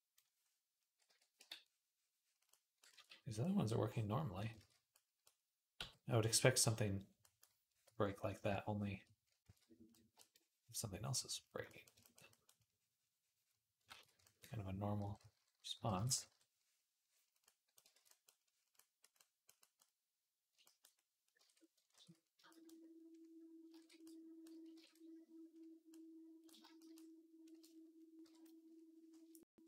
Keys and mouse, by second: 1.2 d, 2.4-4.3 ctrl+drag, 2.7 ctrl+z, 4.4 ctrl+z, 5.6 x, 6.3-9.8 drag, 9.3 ctrl+z, 13.7 ctrl+z, 14.8-16.1 typing, 17.7 ctrl+z, 18.8-20.3 drag, 21.2 ctrl+Tab, 21.8 ctrl+s, 23.5 ctrl+Tab, 24.0 right click, 24.2-26.1 drag, 24.6 ctrl+Tab, 28.0 KP_1, 29.2 click, 29.4 shift+middle click, 29.4 click.